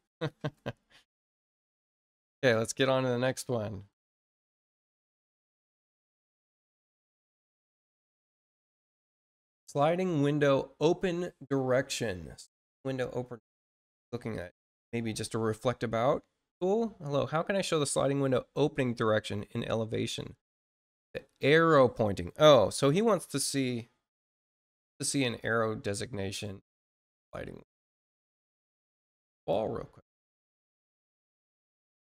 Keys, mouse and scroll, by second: 2.4 click, 5.8 click, 9.4 click, 28.7 click, 29.3 click, 31.9 click.